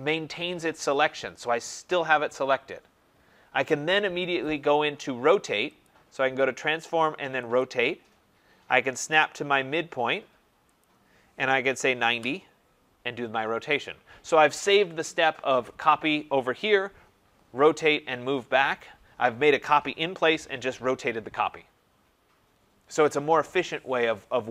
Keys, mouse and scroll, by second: 5.8 click, 7.5 click, 10.7 click, 11.3-12.1 typing.